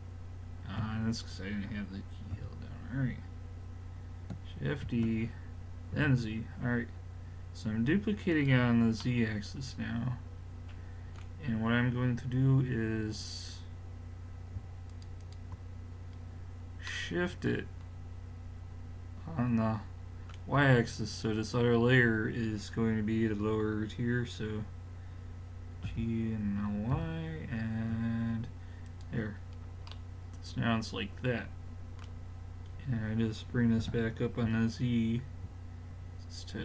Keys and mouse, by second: 0.8 z, 2.3 a, 4.9 shift+d, 10.8 middle click, 14.9-17.0 drag, 17.0 middle drag, 20.6-24.0 middle drag, 25.9 g, 29.4-29.9 middle drag, 32.6-33.4 middle drag, 33.8 g.